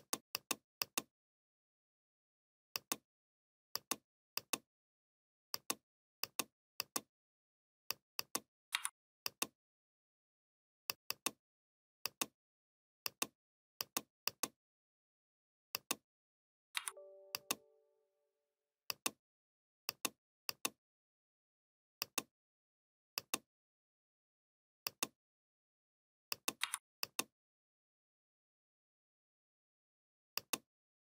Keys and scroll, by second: 8.6 v, 16.6 v, 26.5 v.